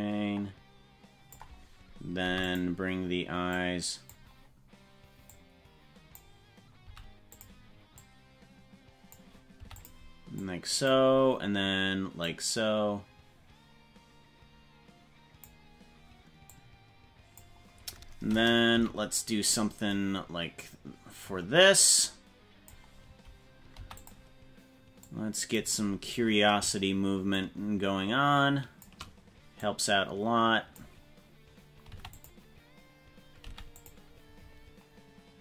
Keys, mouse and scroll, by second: 3.5 click, 5.3 click, 8.0-9.2 drag, 10.4 click, 12.3-15.5 drag, 16.7 click, 18.7 KP_Decimal, 19.4-19.9 scroll down 5, 22.0 click, 23.7 i, 25.0 click, 27.4-29.0 shift+drag, 29.6-30.8 drag, 31.8 u, 32.1 click, 33.4 i.